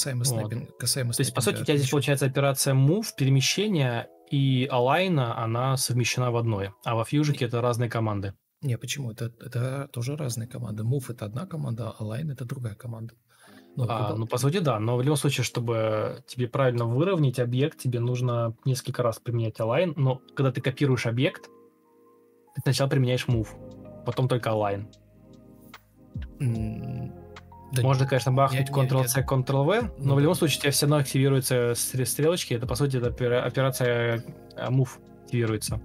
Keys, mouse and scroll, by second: 2.8 Escape, 18.2 BackSpace, 18.4 BackSpace, 18.5 BackSpace.